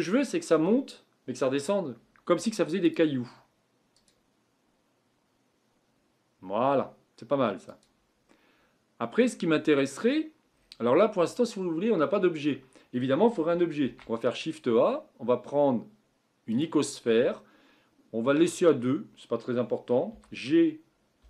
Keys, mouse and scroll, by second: 2.8-7.2 drag, 7.8-8.3 drag, 8.3-9.9 middle drag, 9.9-11.5 scroll up 11, 12.0-13.8 middle drag, 13.8 shift+a, 18.7-19.0 scroll down 3, 19.8 scroll down 3, 20.1 g.